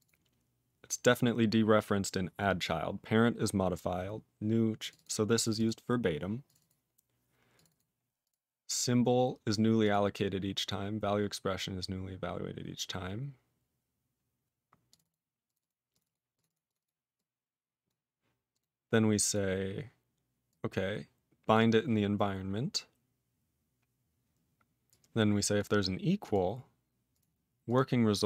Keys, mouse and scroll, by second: 0.0 click, 4.8 click, 4.8 click, 4.9 double click, 5.0 double click, 5.4 click, 5.4 click, 5.5 double click, 5.6 double click, 6.4 click, 6.4 click, 6.5 double click, 6.6 double click, 7.5 click, 7.5 click, 7.6 double click, 7.7 double click, 8.2 click, 8.2 click, 9.8 click, 9.8 click, 14.8 click, 14.9 click, 14.9 double click, 15.0 double click, 15.4 click, 15.5 click, 15.5 double click, 15.6 double click, 15.9 click, 15.9 click, 16.0 double click, 16.0 double click, 16.3 click, 16.3 click, 16.4 double click, 16.5 double click, 16.6 click, 16.7 click, 16.8 double click, 17.1 click, 17.8 click, 18.5 click, 18.5 click, 19.2 click, 19.2 click, 20.4 click, 21.5 click, 22.5 scroll down 2, 23.1-23.9 scroll down 3, 23.9-24.8 scroll down 1, 24.8 click, 25.5 click, 26.2 click, 26.2 click, 27.1 click, 27.1 click, 27.6 click, 27.7 click.